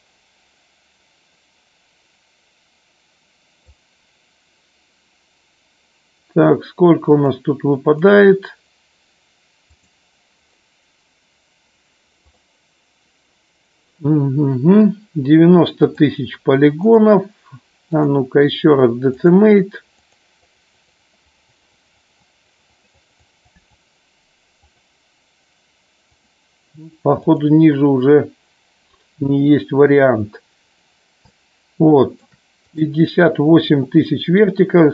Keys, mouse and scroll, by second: 7.2-8.6 drag, 16.8-18.2 drag, 19.2 click, 20.7 click, 26.0-29.4 drag, 31.3-32.1 shift+middle drag.